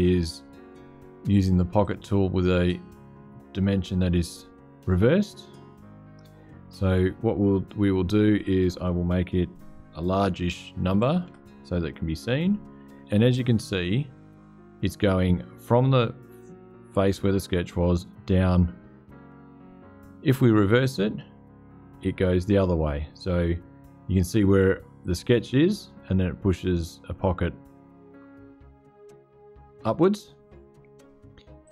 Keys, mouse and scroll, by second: 1.6 click, 10.7 KP_5, 11.0 KP_0, 20.5 click, 31.4 click.